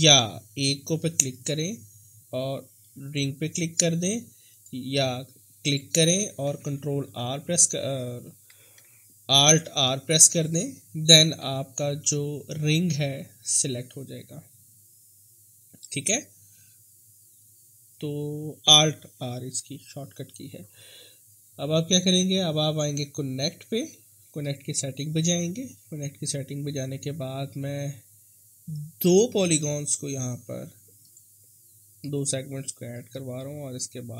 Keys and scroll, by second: 6.7 ctrl+r, 8.8 alt+r, 11.4 w.